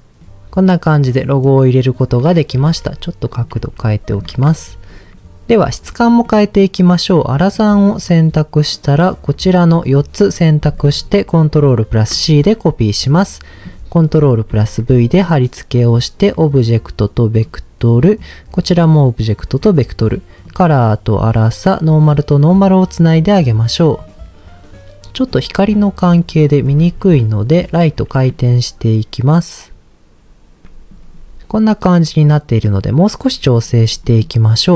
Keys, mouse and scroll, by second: 0.2-1.4 middle drag, 0.2 right click, 1.7-2.6 scroll up 1, 2.6 r, 3.3 click, 3.6 g, 4.1 click, 6.2 middle click, 7.4 click, 8.9 click, 12.1 ctrl+c, 13.0 click, 14.5 ctrl+v, 15.3-15.7 drag, 16.5 click, 18.1-19.4 drag, 19.6-20.4 scroll up 1, 20.4 click, 22.1 click, 24.0-25.0 scroll up 1, 25.3-26.3 scroll down 1, 26.3-27.5 scroll down 6, 27.5 click, 28.1 r, 28.3 z, 30.6 shift+middle click, 33.6-34.1 scroll up 2, 34.0 middle click.